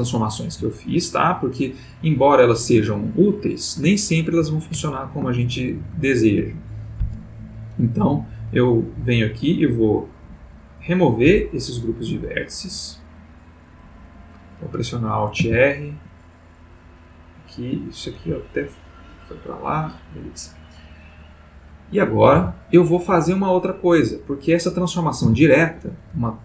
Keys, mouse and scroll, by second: 0.0 click, 0.5 g, 2.1 click, 3.0 ctrl+middle click, 3.9-4.5 ctrl+middle drag, 5.2-6.1 ctrl+middle drag, 7.3 click, 8.9 middle click, 9.4 middle click, 10.0 middle click, 11.8 click, 12.4 click, 14.1 click, 15.4 alt+r, 16.7 click, 17.1 click, 18.2 g, 19.5 click, 21.1 click, 22.3 r, 23.1 Escape, 24.7 click, 25.2 r, 25.6 Escape.